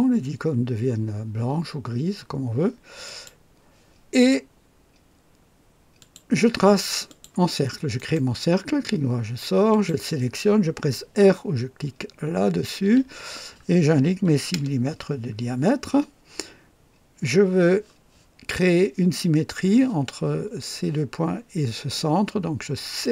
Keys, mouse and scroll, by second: 3.0 click, 5.9 click, 7.0 click, 7.9 right click, 9.7 click, 12.8 r, 14.2 KP_6, 14.5 KP_Enter, 23.0 click.